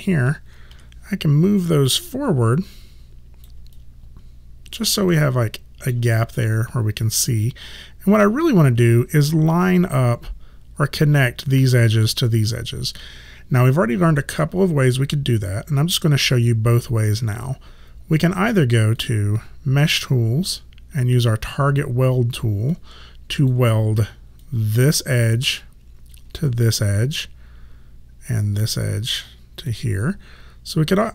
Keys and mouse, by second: 0.8 w, 2.1 click, 3.8 alt+click, 5.2 alt+middle click, 19.0 click, 22.8 alt+click, 28.7 click, 30.9 alt+click.